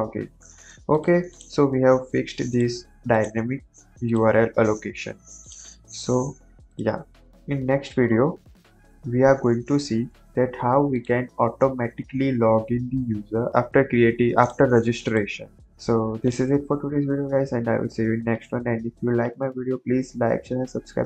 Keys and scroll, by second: 7.4 ctrl+j.